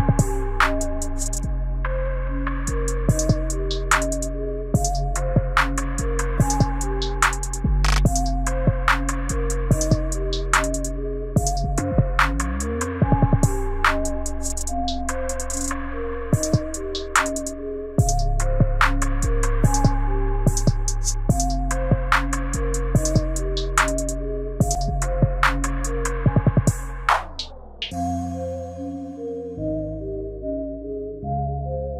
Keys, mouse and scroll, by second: 0.2 click, 1.1 Delete, 2.4-3.1 scroll down 4, 3.1 middle click, 4.5 KP_1, 5.6 shift+middle click, 10.3 click, 11.2-13.4 scroll up 4, 13.4 i, 14.2-15.2 scroll down 3, 15.3 shift+middle click, 18.6 click, 23.6 click, 30.0 click.